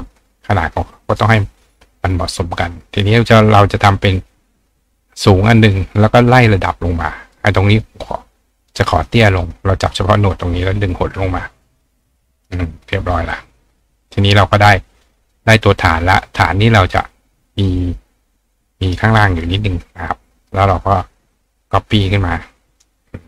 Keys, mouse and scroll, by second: 2.3-3.6 drag, 4.7 click, 7.3 click, 8.6 click, 9.5-10.0 drag, 11.0-12.5 ctrl+drag, 12.8-14.7 drag, 15.3 click, 15.6 click, 16.9-18.9 drag, 19.3 click, 20.0 click, 21.4-22.8 drag, 22.6 right click.